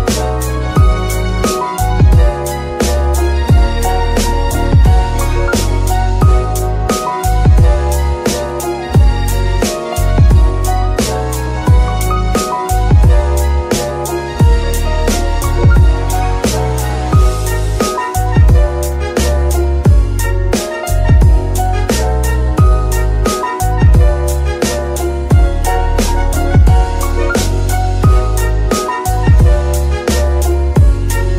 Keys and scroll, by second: 10.1 g, 12.2 Escape, 23.5 Escape, 30.2 ctrl+Tab.